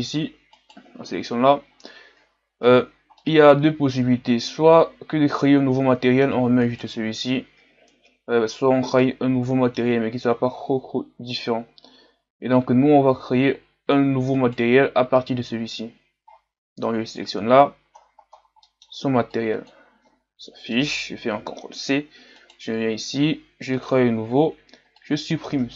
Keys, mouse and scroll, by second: 0.6 right click, 2.7 right click, 3.2-6.2 middle drag, 6.6-9.1 right drag, 9.1-10.4 middle drag, 10.4-11.4 scroll up 1, 11.4-12.8 scroll up 1, 12.8-14.4 scroll up 1, 14.4-15.5 right drag, 24.2-25.7 drag.